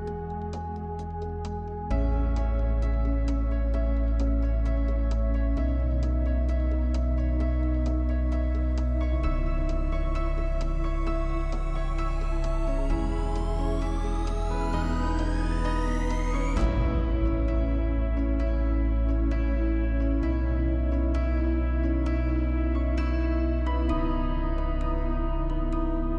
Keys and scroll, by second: 2.6 Delete, 5.2-5.8 typing, 9.4-12.5 typing, 15.9 typing, 17.7-18.6 typing, 19.2 Return, 19.9 space.